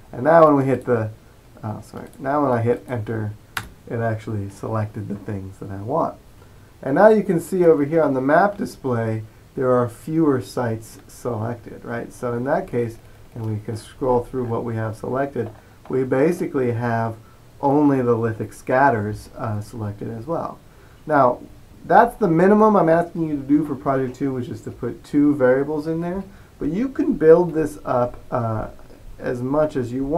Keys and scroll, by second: 3.6 Return, 5.5-6.2 typing.